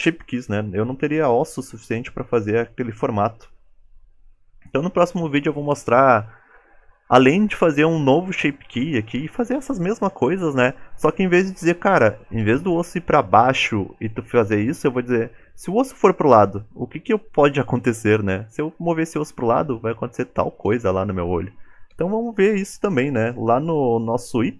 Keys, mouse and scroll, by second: 1.1 KP_1.